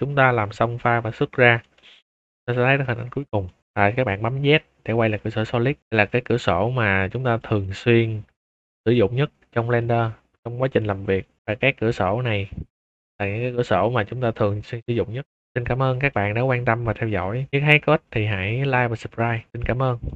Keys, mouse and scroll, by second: 0.7 scroll down 2, 0.9 middle drag, 1.6-7.1 shift+middle drag, 7.3 middle drag, 9.0 scroll up 2, 9.5 middle drag, 9.9 click, 10.3 scroll up 2, 10.6 shift+middle drag, 11.1 middle drag, 11.5 z, 15.9 shift+middle drag, 16.3 scroll down 4, 16.4-16.8 middle drag, 17.0 shift+middle drag, 17.3 middle click, 17.4 scroll up 2, 17.5-19.3 middle drag, 19.6 middle click, 20.0 middle drag.